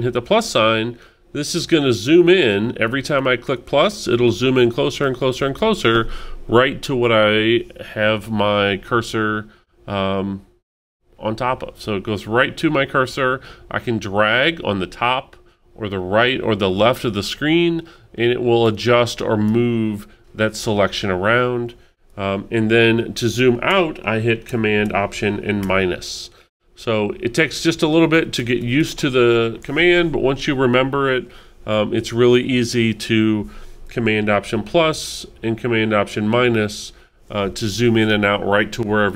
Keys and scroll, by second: 1.1 alt+super+=, 3.2 alt+super+=, 25.6 alt+super+-, 27.2 alt+super+-, 34.4 alt+super+=, 35.9 alt+super+-.